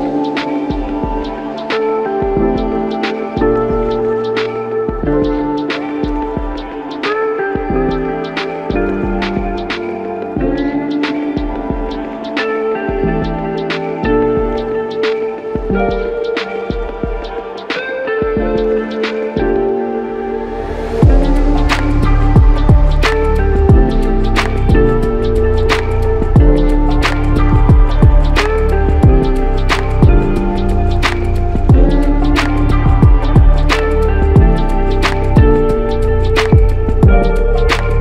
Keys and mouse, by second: 4.1 double click, 6.6 shift+click, 12.4 alt+click, 15.3 ctrl+click, 16.4 ctrl+click, 18.3 ctrl+click, 21.9 ctrl+click, 23.6 w, 24.9 alt+click, 32.1 alt+l, 32.4 ctrl+click, 35.7 typing, 35.9 alt+click.